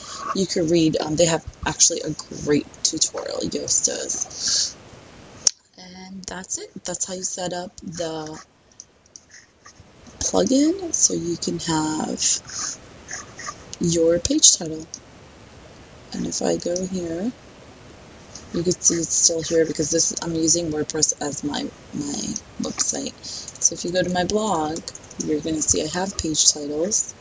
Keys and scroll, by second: 25.2 Return.